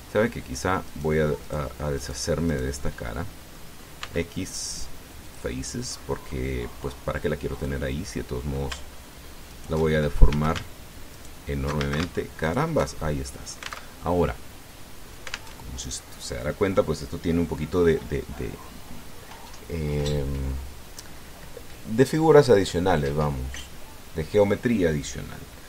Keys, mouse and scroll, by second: 0.5 right click, 1.7 right click, 2.2 right click, 2.8 right click, 3.3 right click, 3.6 click, 4.8 x, 6.0 click, 6.7 middle click, 8.4 click, 10.3 alt+shift+right click, 11.1 a, 12.0 alt+shift+right click, 12.6 alt+shift+a, 13.2 alt+shift+right click, 13.7 alt+shift+middle click, 14.7 alt+Tab, 16.4 alt+Tab.